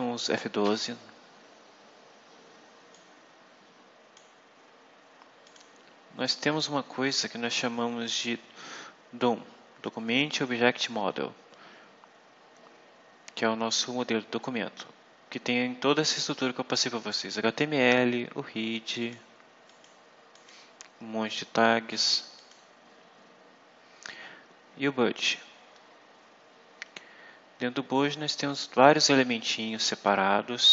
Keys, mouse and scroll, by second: 0.5 F12, 2.8-4.2 drag, 5.4 click, 18.9 click, 19.6 click, 20.2 click, 22.2 click.